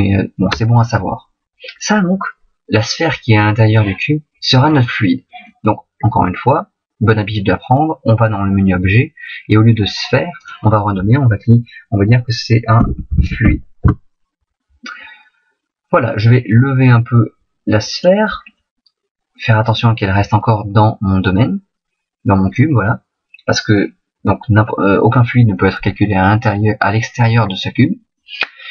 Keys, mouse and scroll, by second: 4.6 middle click, 15.9 middle click, 17.1 click, 18.5 middle click, 28.1 middle click.